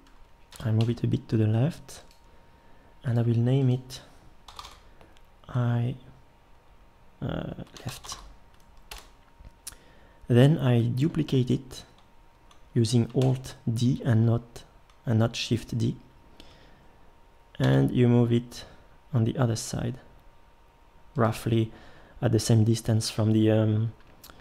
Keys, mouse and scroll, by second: 0.5 g, 3.1-6.4 drag, 13.2 alt+d.